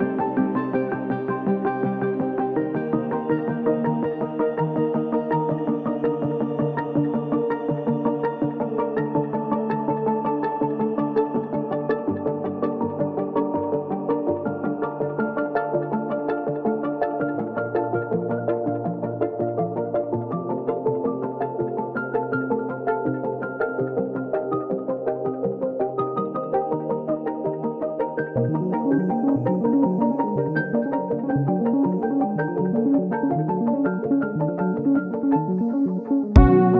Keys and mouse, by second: 2.9-3.3 middle drag, 3.5-3.8 shift+middle drag, 8.6-8.9 shift+middle drag, 9.0-9.9 middle drag, 10.1 click, 10.5-11.8 middle drag, 12.3 click, 13.1 shift+d, 17.9 s, 19.6-20.2 drag, 20.9 Tab, 21.7 2, 23.2 alt+click, 26.4 shift+click, 28.6 click, 31.4 alt+shift+click, 32.5 shift+click, 33.8 click, 34.2 shift+click, 34.4 middle click, 34.9 middle click, 35.6 ctrl+middle click, 36.0 shift+middle click.